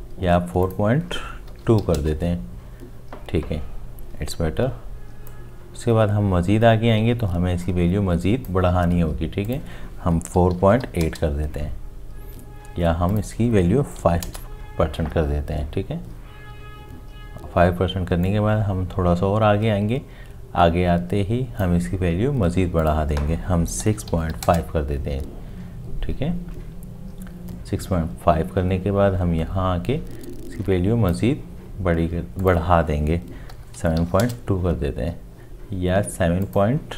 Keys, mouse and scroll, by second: 1.5 4, 1.6 ., 1.8 2, 1.9 Return, 10.4 4, 10.8 8, 10.8 ., 11.0 Return, 14.0 5, 14.2 Return, 23.9 6, 24.3 5, 24.3 ., 24.4 Return, 33.5 7, 33.8 ., 34.0 2, 34.2 Return.